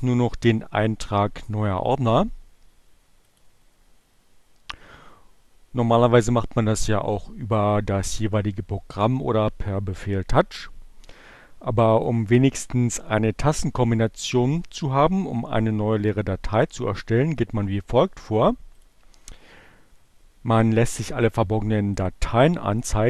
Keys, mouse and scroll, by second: 3.4 click, 11.8 click, 18.8 click, 21.4 click.